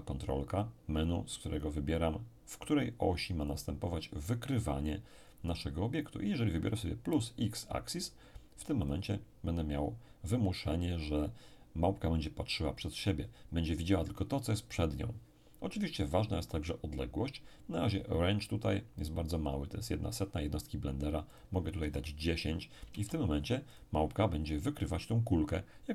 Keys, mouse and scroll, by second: 1.6 click, 8.8 click, 21.3 click, 21.8 1, 22.9 0, 23.7 click.